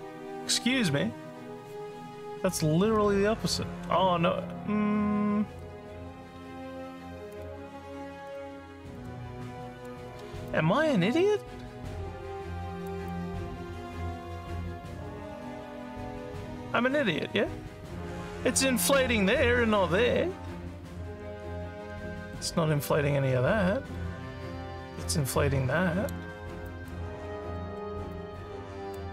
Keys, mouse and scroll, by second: 7.3 click, 8.3 click, 8.9 click, 9.6 click, 10.5-12.8 alt+drag, 13.1-26.1 drag, 26.6 alt+click, 27.2 alt+scroll down 1, 27.5 alt+middle click, 28.1 click.